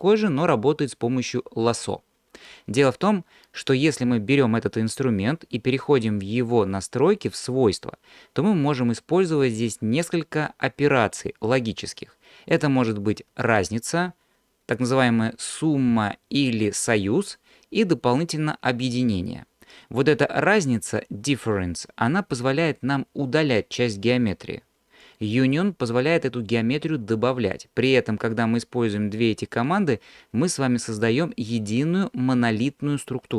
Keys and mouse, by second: 12.6-33.3 drag.